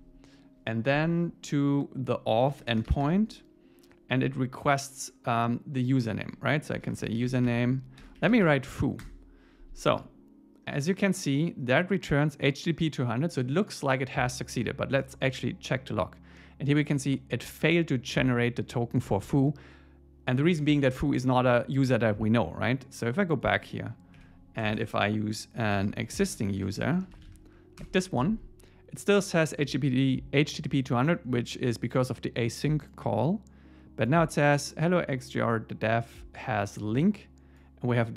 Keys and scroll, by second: 9.0 Return, 24.1 Up, 26.3 alt+l, 27.8 Return.